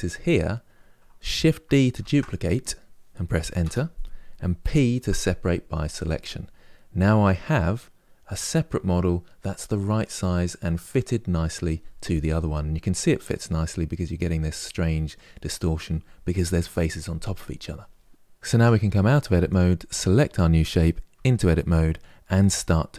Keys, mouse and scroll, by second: 1.7 shift+d, 4.3 p, 12.4-15.5 middle drag, 18.2 Tab, 19.2 click, 20.8 Tab.